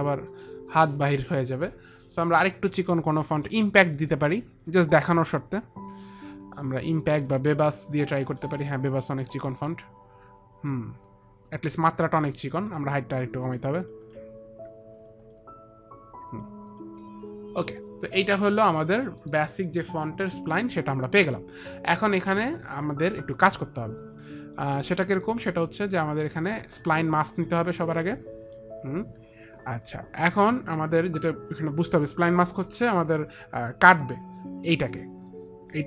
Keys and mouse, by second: 0.7 middle click, 1.2 middle click, 3.7 click, 3.7 middle click, 7.5 click, 8.5 middle click, 9.5 middle click, 9.5 click, 11.4 click, 11.4 middle click, 12.7 click, 14.1 click, 14.3 click, 15.3 click, 19.9 middle click, 21.2 middle click, 27.1 click, 30.5 click.